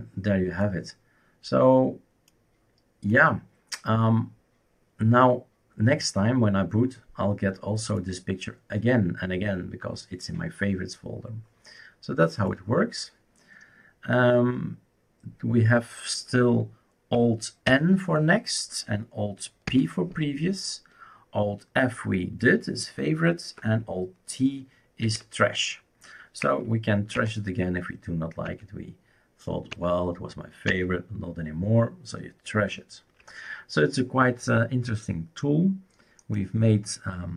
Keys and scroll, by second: 17.7 alt+n, 19.7 alt+p, 25.1 alt+t, 27.2 alt+Right, 28.5 alt+Right, 29.7 alt+Right, 30.7 alt+Right.